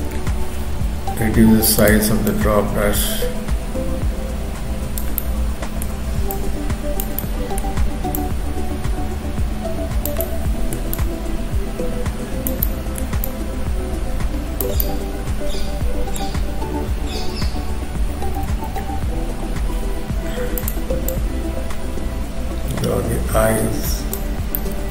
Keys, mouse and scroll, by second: 0.8 f, 2.3 click, 5.2 middle click, 6.3 click, 7.2 middle click, 8.2 click, 11.0 shift+click, 12.6 middle click, 13.2 shift+click, 14.8 middle click, 16.4-17.0 scroll up 1, 17.0-17.8 scroll up 1, 18.4 x, 19.8 f, 21.1 click, 24.4-24.9 scroll down 3, 24.6 middle click.